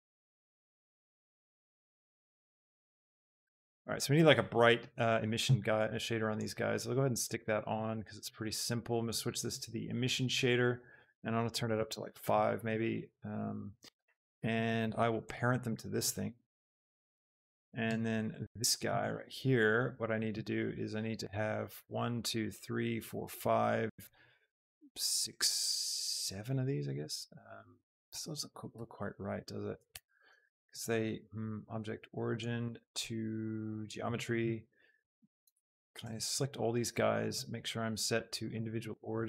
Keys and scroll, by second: 0.1 z, 1.6 z, 11.9 Return, 16.3 ctrl+p, 17.0 Return, 28.8 s, 29.9 Escape, 35.4 shift+Tab, 36.1 a.